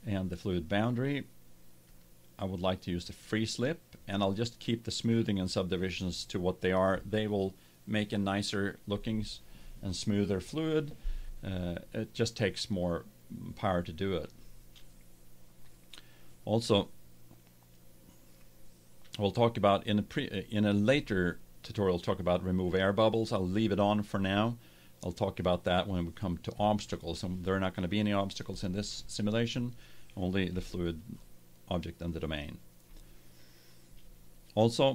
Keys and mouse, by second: 1.8-3.7 drag, 30.5 middle drag, 33.1-34.9 middle drag.